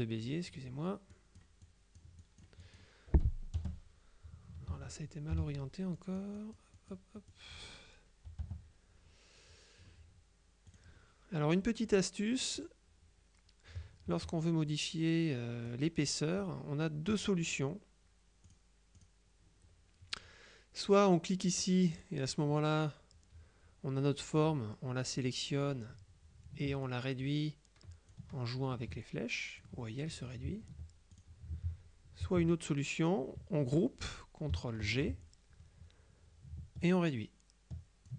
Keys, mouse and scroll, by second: 1.2 click, 2.3 click, 3.7 Return, 4.8 ctrl+z, 6.1-7.5 drag, 6.1 z, 8.5 Return, 10.7 click, 11.9 click, 12.6 click, 14.1 F2, 14.8-16.3 drag, 18.5 click, 21.5 click, 24.5 click, 26.9-28.7 ctrl+drag, 29.1 ctrl+click, 31.2 ctrl+click, 31.7 ctrl+z, 34.9 ctrl+g, 36.9-38.1 ctrl+drag.